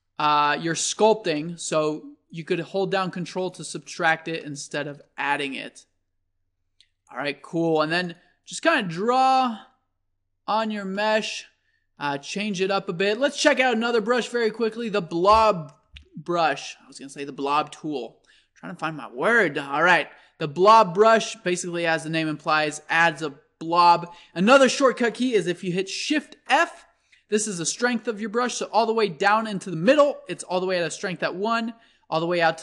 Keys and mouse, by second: 1.4-2.3 middle drag, 2.3-4.1 drag, 4.1-5.4 middle drag, 5.4-11.0 drag, 11.0-13.7 middle drag, 13.7-15.5 drag, 16.3 middle click, 17.3-19.1 drag, 22.4-24.3 drag, 26.5 shift+f.